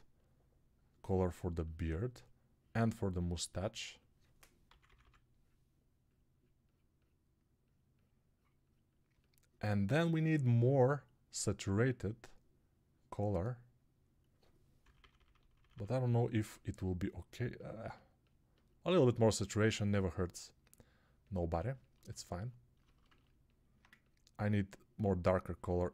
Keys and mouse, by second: 4.7-14.7 drag, 4.7 [, 4.9 [, 14.7-18.6 middle drag, 14.7-15.4 typing, 18.6-25.9 drag.